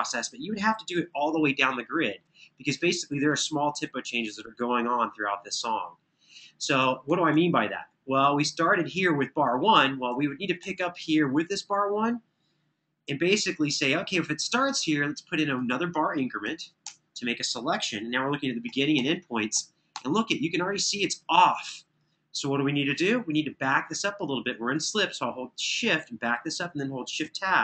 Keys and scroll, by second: 0.9 super+[, 1.1 super+[, 3.6 super+[, 6.5 super+], 6.7 super+], 9.6 super+], 9.8 super+], 16.1-16.6 typing, 18.4 Left, 18.7 Right, 19.7 Right, 26.9 shift+Tab.